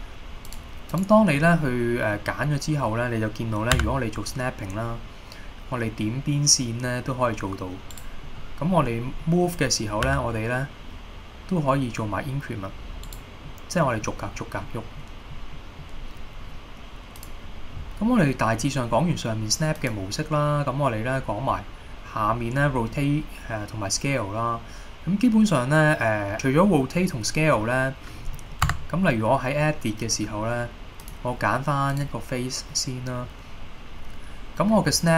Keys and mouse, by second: 0.6 click, 1.1 click, 1.7-2.2 middle drag, 3.9 g, 8.0 right click, 8.5 middle click, 9.3 middle click, 10.2 g, 13.2 right click, 13.6-14.1 middle drag, 14.7-15.0 middle drag, 15.6 middle click, 17.2-18.9 drag, 19.9-26.3 drag, 28.4 middle click, 28.8 Tab, 31.1 click, 32.0 click, 32.8-33.4 middle drag, 34.9 e.